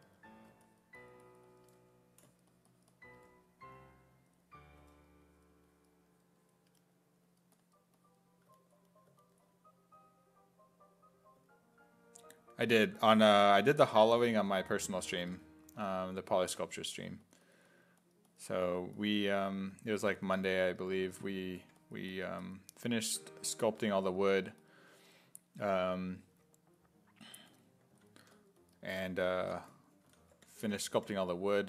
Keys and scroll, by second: 4.8 s, 13.2 s, 13.7 1, 15.8 s, 16.5 1, 21.3 s, 21.6 1, 23.8 1, 27.9 s, 28.2 1, 29.4-31.6 typing.